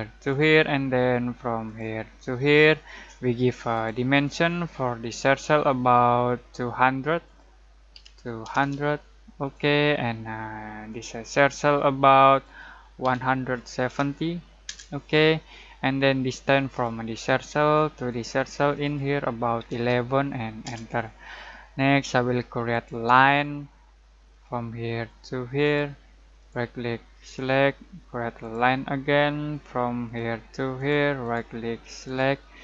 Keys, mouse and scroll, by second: 7.9-8.6 typing, 9.4 click, 13.0-13.8 typing, 14.6 Return, 16.7 click, 19.5 click, 19.6 typing, 20.6 Return, 22.7 click, 26.4 right click, 27.2 click, 31.2 right click, 32.0 click.